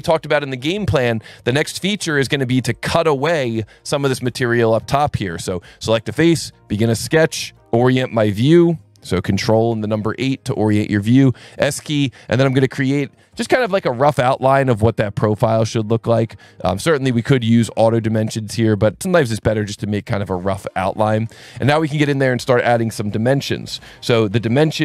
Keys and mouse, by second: 1.7 alt+1, 2.0 click, 2.7 click, 4.5 alt+1, 5.4 click, 6.9 click, 9.7 ctrl+8, 10.7 s, 11.5 click, 12.9 click, 14.7 click, 16.3 click, 17.4 click, 18.7 click, 20.8 Escape, 21.2 s, 22.0 click.